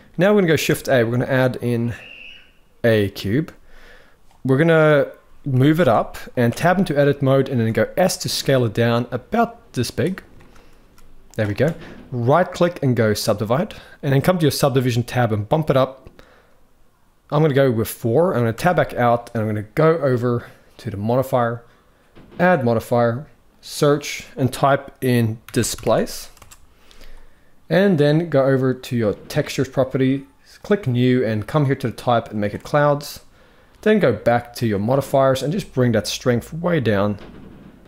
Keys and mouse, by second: 0.2 shift+a, 5.2 g, 6.2 Tab, 6.5 middle click, 7.3 s, 10.1 shift+middle click, 11.3 middle click, 12.0 right click, 13.1 middle click, 15.1 click, 15.7 click, 17.1 click, 17.9 middle click, 18.3 Tab, 20.6 click, 22.1-26.1 drag, 30.4-30.8 drag, 31.4-32.1 drag, 35.4-37.8 shift+drag.